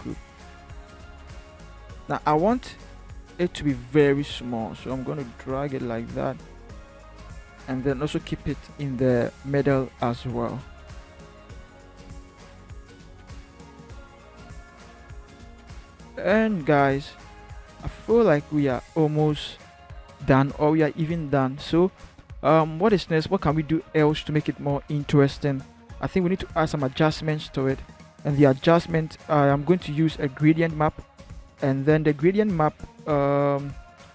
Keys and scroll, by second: 2.2 ctrl+t, 8.0 shift+Right, 8.3 shift+Right, 10.3 Return, 11.3 ctrl+h, 12.7 ctrl+-, 15.3 ctrl+-, 16.4 ctrl+-, 16.8 ctrl+=.